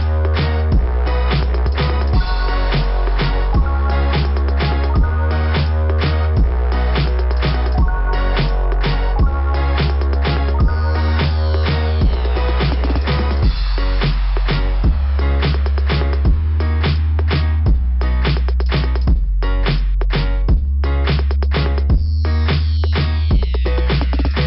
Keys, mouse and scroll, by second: 1.6 click, 7.9 click, 8.6 scroll up 2, 12.5 click, 15.4 click, 15.4 click, 16.0 click, 16.1 click, 17.6 click, 18.4 click, 18.7 click, 19.1 click, 20.4 right click, 20.4 ,, 20.5 right click, 21.9 click, 22.0 click, 22.7 right click, 22.7 click, 22.9 right click, 24.0 click.